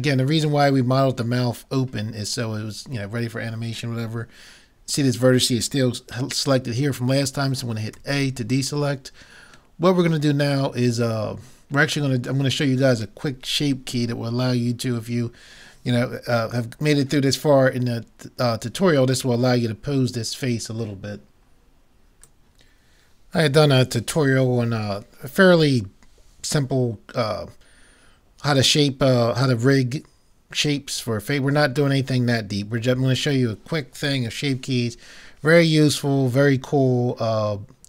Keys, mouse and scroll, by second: 8.0 a, 9.8 middle click.